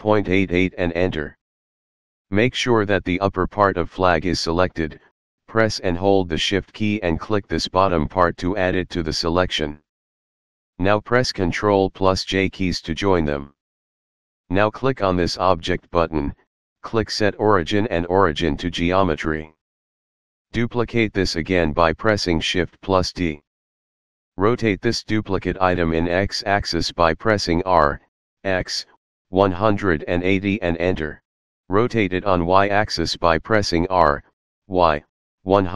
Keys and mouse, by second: 0.4 Return, 1.5 Return, 3.4 shift+middle click, 8.1 shift+click, 11.4 ctrl+j, 16.1 click, 20.5 shift+d, 21.9 right click, 25.4 r, 26.8 x, 28.6 KP_1, 29.0 KP_8, 30.0 KP_0, 30.0 Return, 31.7 r, 33.8 y, 35.0 KP_1, 35.4 KP_8.